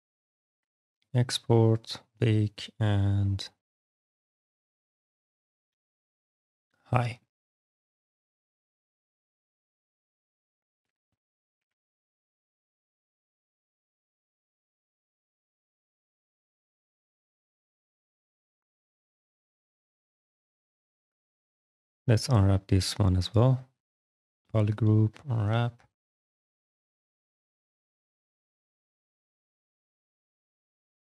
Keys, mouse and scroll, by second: 0.8 click, 1.6 click, 3.1 click, 3.7 click, 4.7 h, 5.0 i, 5.5 g, 5.6 h, 6.3 click, 8.8 click, 9.5 alt+click, 10.4 click, 11.1 click, 11.7 f, 12.7 click, 13.2 s, 13.2 click, 13.5 alt+click, 13.9 click, 15.4 shift+d, 17.2 ctrl+d, 17.8 shift+d, 19.1 click, 22.7 click, 24.8 click, 28.1 alt+x, 28.7 click, 30.6 click.